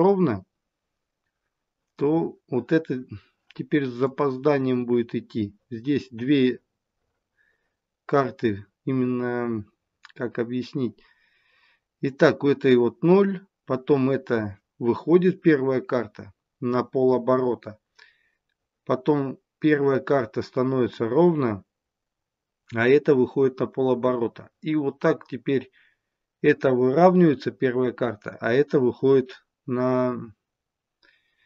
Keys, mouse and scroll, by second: 3.9 click.